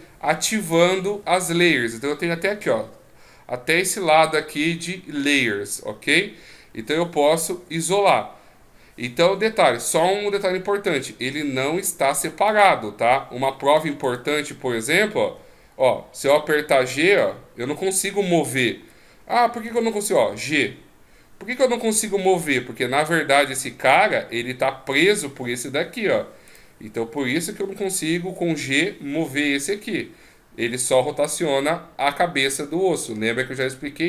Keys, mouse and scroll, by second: 0.5 shift+click, 12.5 click, 13.7 right click, 14.1 right click, 15.3 g, 19.7 g, 23.8 shift+click, 24.9 right click, 26.5 right click, 27.2 g.